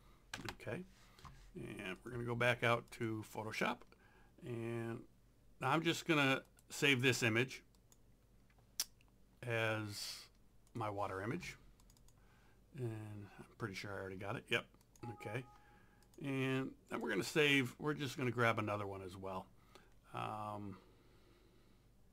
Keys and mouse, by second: 0.0-0.1 typing, 0.4 KP_Enter, 2.0 click, 6.5 right click, 7.8 click, 10.7 click, 14.9 click.